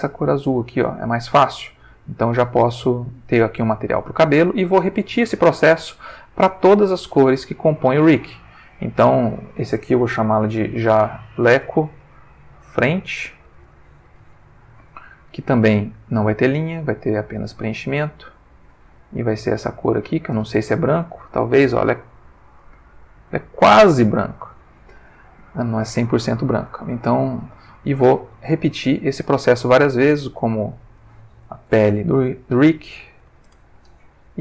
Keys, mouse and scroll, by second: 0.2 click, 1.8 click, 5.0 click, 8.4 click, 9.3 click, 10.5-13.4 typing, 13.6 Return, 16.0 click, 16.9 click, 17.5 click, 18.5 click, 19.8 click, 21.1 click, 22.6 click, 28.3 click, 30.1 click, 31.0 click, 31.9 shift+p, 32.0 shift+e, 33.2 l, 33.3 e, 33.4 Return.